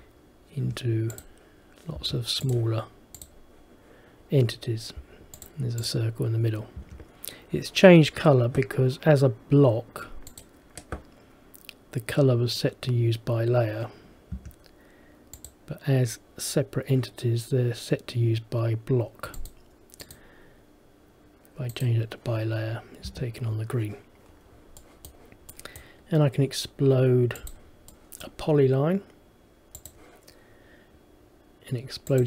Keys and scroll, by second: 0.7 Escape, 6.9 Escape, 14.5 Escape, 23.2 Escape.